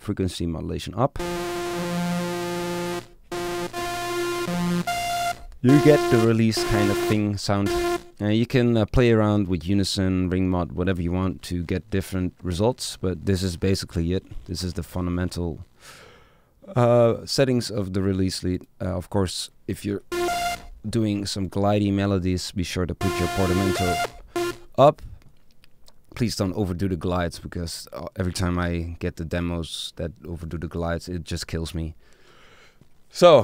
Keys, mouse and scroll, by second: 8.6-10.6 middle drag.